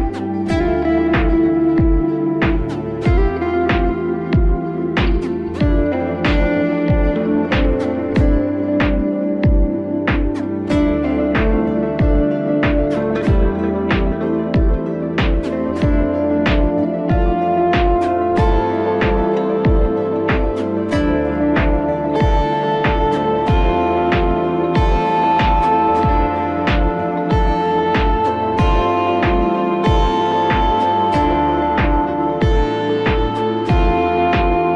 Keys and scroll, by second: 6.0 ctrl+z.